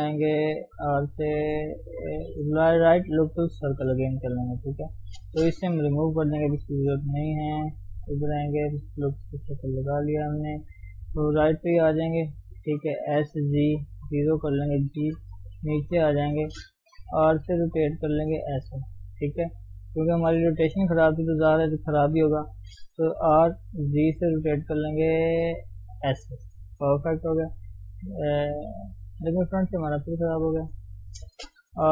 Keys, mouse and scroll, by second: 0.9 r, 3.5-4.9 right drag, 4.9 click, 7.3 x, 7.7 click, 8.7-10.8 middle drag, 10.8 scroll down 1, 11.0 KP_3, 11.6-12.1 scroll up 1, 13.2 s, 14.9 g, 17.1 r, 23.3 r, 27.1 KP_1, 28.7-30.4 middle drag, 30.4 ctrl+z, 31.7 r.